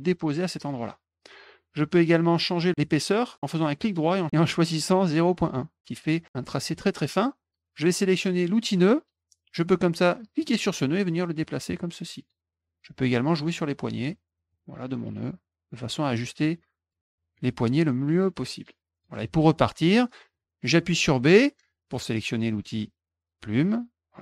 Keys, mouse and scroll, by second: 3.6 right click, 5.4 click, 8.6 click, 10.4 click, 11.1-12.3 drag, 13.3 click, 14.5-15.7 drag, 16.4 click, 17.3-19.0 drag.